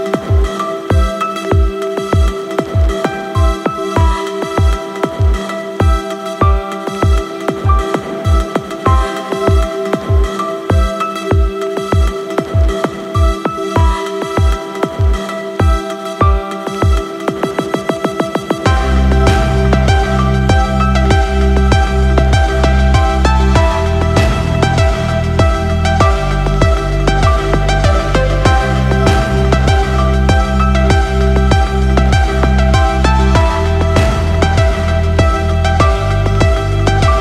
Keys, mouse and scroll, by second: 0.6-1.7 scroll down 6, 1.9 click, 2.3 click, 4.7 click, 5.8-7.8 drag, 8.0 click, 8.7 click, 9.7-10.9 drag, 11.2 click, 13.4 click, 14.1-15.5 right drag, 18.6-23.1 drag, 24.3 right click, 26.3 click, 26.9 space.